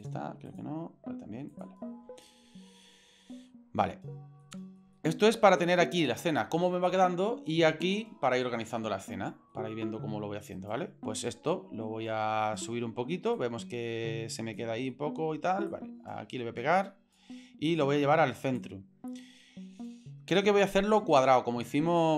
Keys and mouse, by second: 0.0 click, 0.5 click, 1.5 click, 1.9 n, 2.4 n, 4.4-4.8 shift+middle drag, 4.9-5.7 ctrl+middle drag, 8.4-9.5 middle drag, 10.6 right click, 12.5 middle click, 13.4-14.6 drag, 14.9 middle click, 15.7-17.2 drag, 17.9 middle click, 18.6-21.0 drag, 22.0 click.